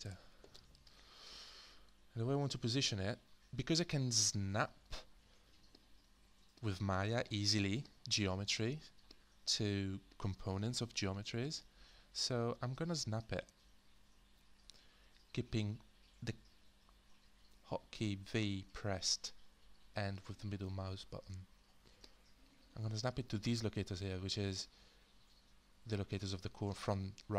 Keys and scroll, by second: 0.0 Return, 12.5-15.8 typing.